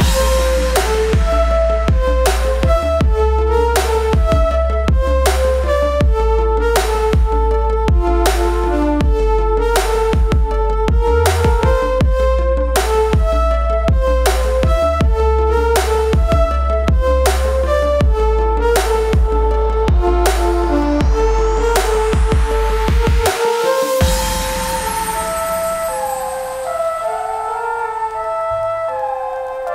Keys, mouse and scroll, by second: 6.3-8.7 drag, 11.1 Up, 12.8 ctrl+click, 13.2 ctrl+space, 13.4 click, 13.8 space, 23.8-28.2 alt+drag, 28.2 Return, 29.4-29.7 drag.